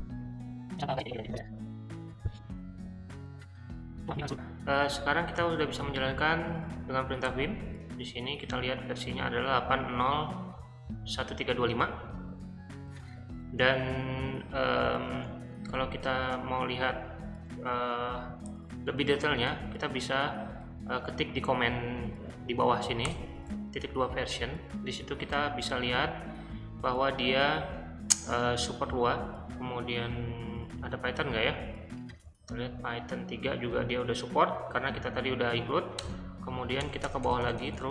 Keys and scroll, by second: 5.1-6.3 typing, 7.3 Return, 15.7 shift+;, 18.1-20.0 typing, 23.1 Return, 36.0 Return, 36.8 Return, 37.1 Return, 37.2 Return, 37.4 Return, 37.6 Return, 37.7 Return.